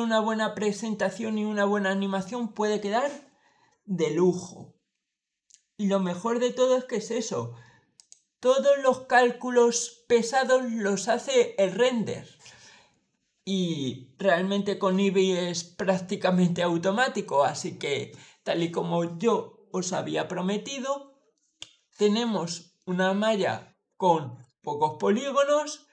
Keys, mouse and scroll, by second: 7.8 click.